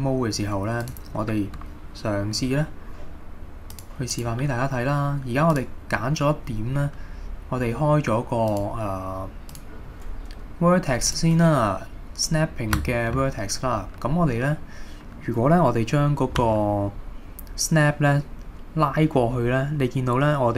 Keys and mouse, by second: 0.8 click, 3.8 click, 4.2 click, 5.5 click, 6.0-6.4 middle drag, 8.5-11.2 drag, 12.9 shift+middle drag, 14.1-14.6 middle drag, 16.4 g.